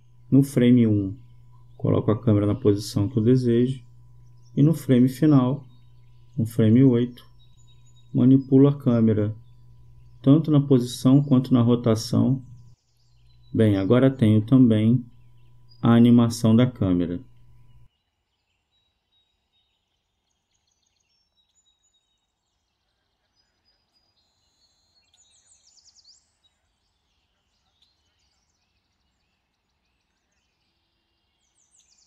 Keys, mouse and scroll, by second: 0.2-2.8 drag, 4.1-5.9 drag, 8.9-10.6 drag, 12.1-15.1 drag, 16.2-19.3 drag, 19.4-21.7 drag, 28.0-29.1 drag, 29.9-31.2 drag.